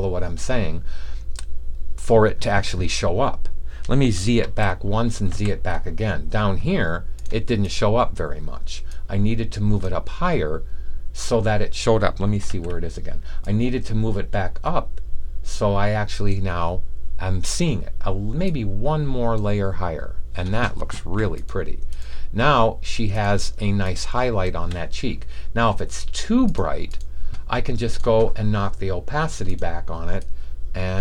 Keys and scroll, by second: 4.3 super+z, 5.2 alt+super+z, 12.5 super+z.